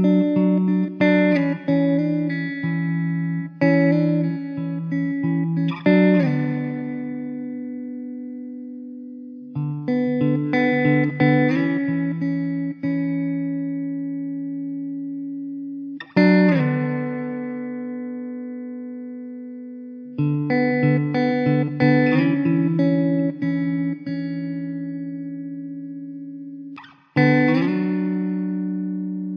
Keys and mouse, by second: 4.3 alt+w, 8.3 F4, 11.2 alt+w, 12.6 alt+middle click, 13.1 alt+middle click, 17.5 2, 20.4 alt+middle click, 22.2 alt+w, 26.9 alt+w, 27.6 middle click.